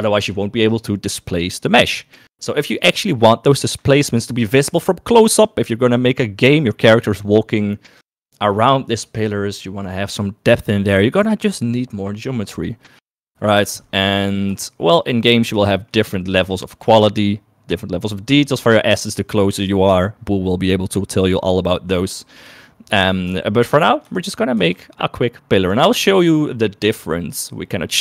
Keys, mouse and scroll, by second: 15.2 shift+middle click, 16.7 shift+middle click, 17.6 shift+middle click, 24.0 shift+middle click, 25.0 shift+middle click, 25.5 shift+a.